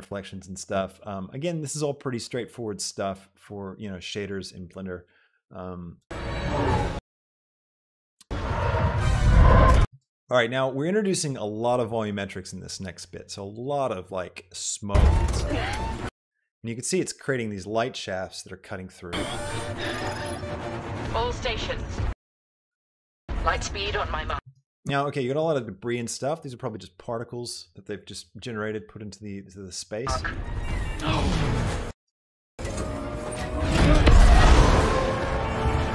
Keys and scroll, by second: 6.0 space, 8.2 space, 15.2 space, 19.2 space, 22.2 space, 24.4 space, 30.2 space, 32.8 space.